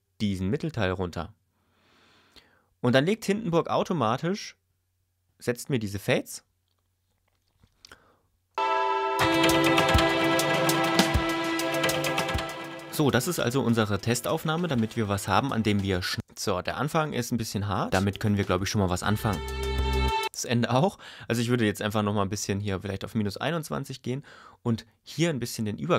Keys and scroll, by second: 8.5 space, 16.2 space, 17.9 space, 20.2 space.